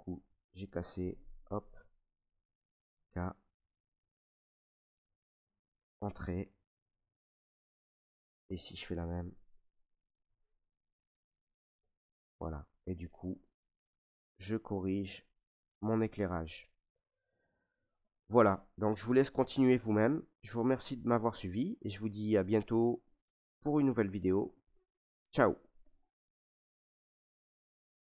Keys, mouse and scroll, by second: 0.0 ctrl+r, 0.0 click, 1.1 click, 1.9 right click, 2.9 k, 3.9 click, 4.9 click, 5.4 Return, 5.6 middle click, 5.6 middle click, 5.7 middle click, 6.9 middle click, 7.2 middle click, 7.2 middle click, 7.4 middle click, 8.3 right click, 9.5 k, 10.2 click, 11.2 click, 11.8 Return, 12.0 middle click, 12.1 middle click, 12.1 middle click, 12.6 Tab, 13.5 middle click, 16.3 middle click, 17.1 middle click, 17.8 scroll down 1, 18.3 middle click, 18.4 scroll down 3, 19.2 shift+middle click, 19.4 shift+middle click, 19.5 middle click, 19.6 middle click, 20.3 middle click, 20.6 middle click, 20.7 middle click, 20.8 middle click, 20.8 shift+middle click, 21.7 shift+middle click, 22.0 middle click, 22.1 middle click, 23.2 middle click, 23.6 middle click.